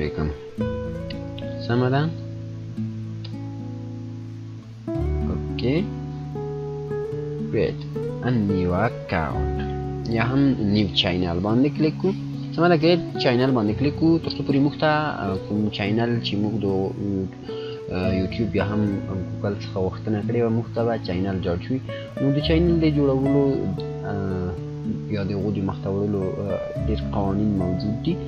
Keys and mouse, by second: 0.0-3.1 typing, 4.2-5.6 typing, 7.3 click.